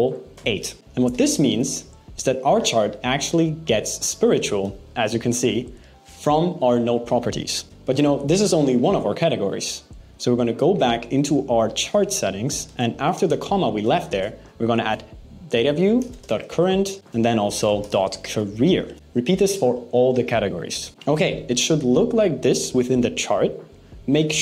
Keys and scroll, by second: 17.3 BackSpace.